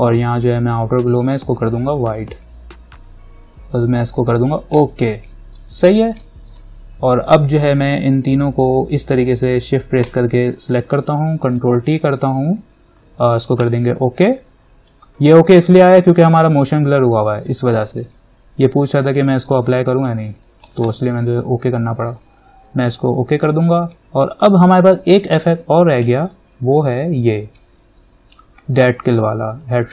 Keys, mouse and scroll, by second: 6.6 ctrl+-, 10.2 shift+click, 11.8 ctrl+t, 13.8 click, 14.9-20.8 alt+drag, 25.1-29.9 drag.